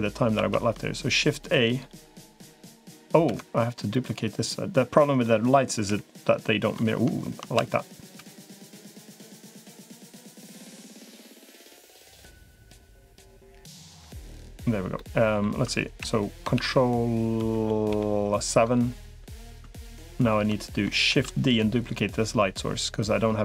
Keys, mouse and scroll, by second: 0.1 shift+a, 3.1 Escape, 4.8 middle click, 5.7 KP_1, 7.3 shift+KP_1, 8.1 shift+KP_1, 11.5-12.6 middle drag, 13.9 KP_5, 14.8 middle click, 15.9 KP_1, 16.5 ctrl+KP_1, 17.3 ctrl+KP_3, 17.7 ctrl+KP_7, 19.5 shift+middle click, 21.1 shift+d, 21.9-23.4 drag.